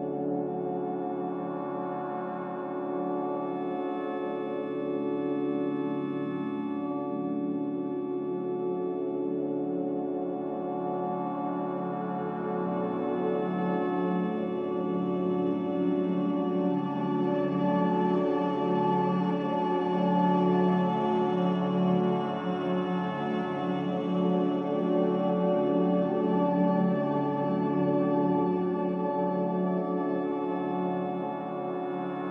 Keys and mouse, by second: 1.2 middle click, 2.5 click, 2.5-4.4 middle drag, 2.5-4.4 right drag, 3.6 click, 5.7 ctrl+r, 18.3 alt+z, 21.0 ctrl+z, 22.2-23.2 middle drag, 24.6 ctrl+r.